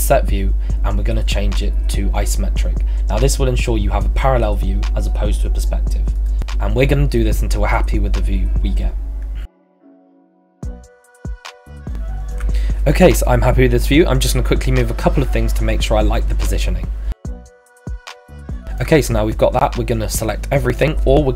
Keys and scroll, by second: 21.2-21.3 typing.